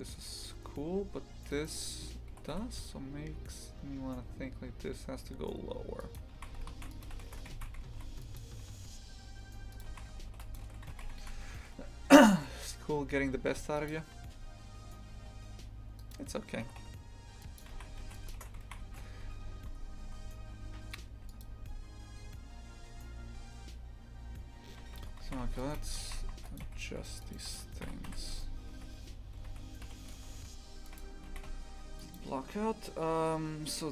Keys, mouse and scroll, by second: 1.5-2.4 right drag, 2.4 g, 6.4 shift+f, 7.1 a, 7.6 shift+f, 9.8 click, 9.9 shift+f, 16.0 right click, 16.7 g, 17.8 shift+f, 25.0 Tab, 25.3 shift+f, 25.8 2, 26.1 shift+f, 26.6 a, 27.2 alt+shift+right click, 27.9 v, 28.4 a, 28.8 a, 29.9 l, 31.0 Delete, 31.3 shift+f.